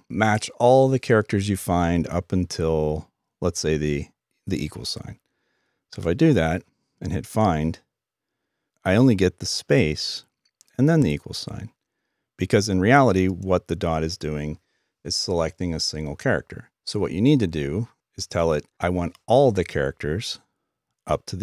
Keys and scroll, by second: 5.7 typing.